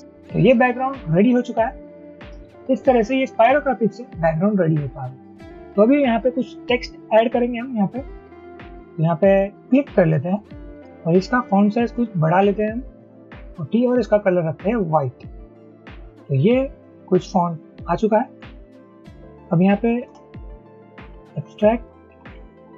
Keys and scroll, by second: 18.4 ctrl+a, 20.1-22.7 typing, 22.0 Return.